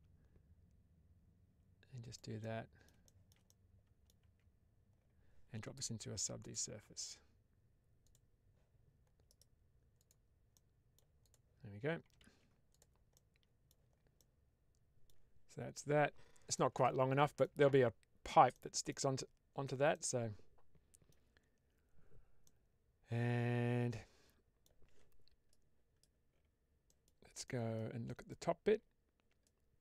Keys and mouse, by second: 1.9 click, 2.3 middle click, 3.0 shift+middle click, 3.3 middle click, 4.1 Tab, 6.4-8.1 drag, 9.2-10.0 right drag, 10.4-10.9 middle drag, 11.1 click, 12.2 ctrl+z, 12.6 drag, 13.0-13.6 middle drag, 14.0-15.0 middle drag, 16.4-17.3 middle drag, 18.4 middle click, 19.8-21.0 middle drag, 22.3-24.6 middle drag.